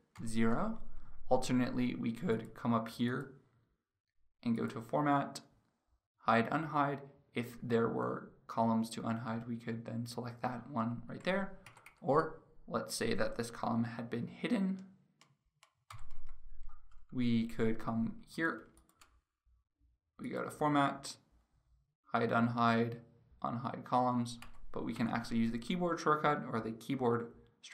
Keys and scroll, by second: 15.9 ctrl+0.